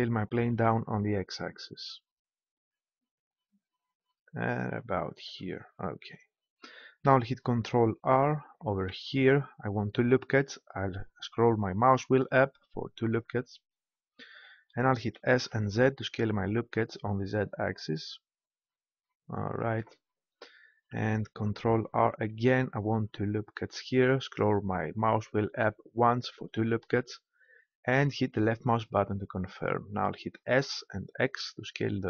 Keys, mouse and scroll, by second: 5.2-6.9 drag, 8.8 ctrl+r, 13.2-15.0 drag, 15.1 s, 19.6-21.5 drag, 22.2 ctrl+r, 28.3-30.0 drag, 30.5 s.